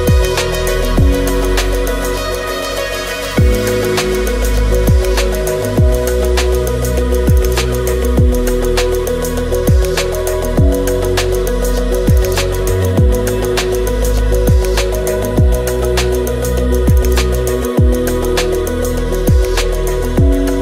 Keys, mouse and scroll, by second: 8.8 click, 9.8 shift+click, 10.2 KP_5, 10.3 shift+click, 10.6 shift+click, 10.8 click, 11.4 alt+click, 12.0-14.3 drag, 14.4 click, 15.2 shift+s, 15.6 middle click, 15.7 5, 15.9 s, 16.1 KP_0, 16.2 alt+click, 16.9 alt+click, 17.4 g, 18.1 g, 18.5 s.